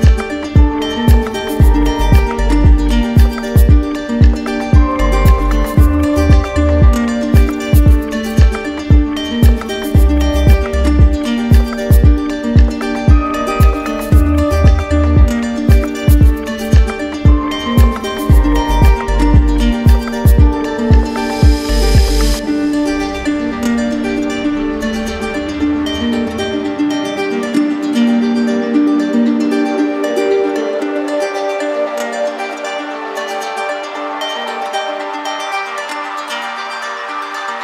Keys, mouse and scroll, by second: 3.5-4.6 drag, 5.5-6.6 drag, 7.4 click, 8.6 ctrl+click, 10.3 click, 11.2 ctrl+click, 23.8 click, 27.8 click, 32.3 click, 32.7 shift+click, 33.4 alt+click, 34.2 alt+click, 37.2 click.